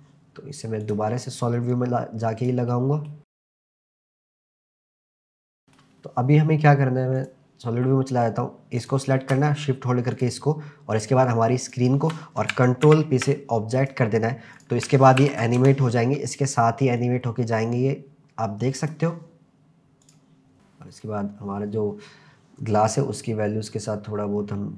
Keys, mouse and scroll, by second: 0.9 click, 1.7 click, 2.7-3.1 middle drag, 3.3 click, 3.7 click, 4.5 click, 4.6 KP_0, 4.9 ctrl+s, 4.9 scroll down 1, 5.1 scroll up 1, 5.3-5.8 middle drag, 6.1-6.4 scroll up 1, 7.3 click, 7.3 scroll up 1, 7.9-8.8 middle drag, 8.8 click, 10.1 shift+click, 11.6 shift+click, 12.9 ctrl+p, 14.6 click, 15.3 ctrl+s, 15.5 KP_0, 15.9 c, 17.0-19.1 drag, 20.4 click, 20.9 click, 23.9-24.7 drag.